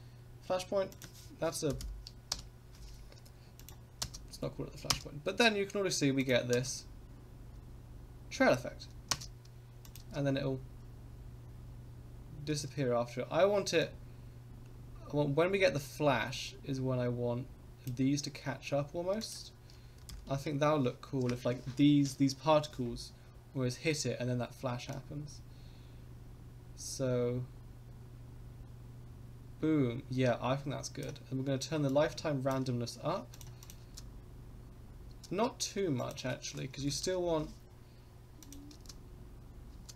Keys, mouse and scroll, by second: 0.9-2.8 drag, 3.6 click, 4.0 space, 4.9 space, 6.2 click, 6.5 space, 9.1 space, 9.9 click, 10.0 space, 12.5 space, 13.8-17.9 drag, 19.2-20.9 drag, 24.9-31.0 drag, 31.8 click, 33.3 click, 33.6 click, 33.8 space, 35.1 space, 36.0-37.4 drag, 38.4 click, 38.7 space, 39.7 space.